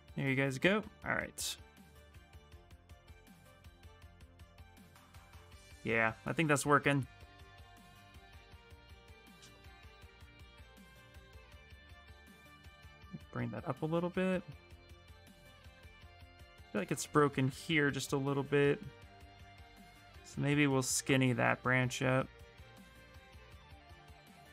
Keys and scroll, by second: 8.3 s, 9.1 s, 13.1 s, 14.1 s, 14.4 s.